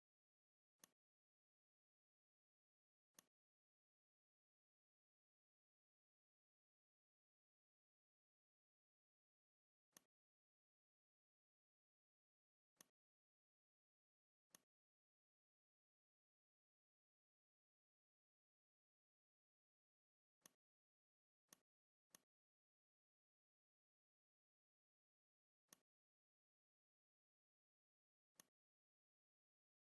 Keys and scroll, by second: 0.4 v, 8.5 shift+c, 12.1 a, 20.3 a, 25.1 m, 27.9 r.